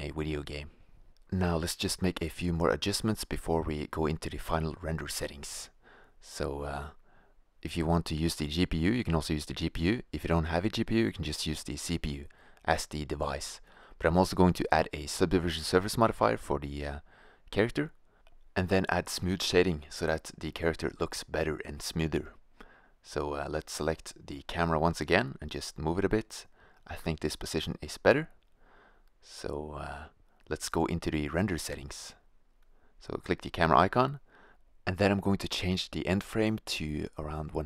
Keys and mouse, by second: 0.8-1.3 drag, 1.0 s, 2.1 click, 2.3 right click, 3.2 middle click, 3.5 right click, 4.2 middle click, 5.7 click, 6.6 middle click, 8.2 click, 12.0-16.2 drag, 16.2 middle click, 18.7-20.0 drag, 20.0 middle click, 20.8 shift+z, 22.1 right click, 22.3 shift+a, 22.9 shift+f, 25.8 click, 25.9 shift+z, 28.0 shift+z, 28.4 shift+f, 30.0 click, 32.6-34.2 drag, 35.3-37.6 drag, 37.0 0.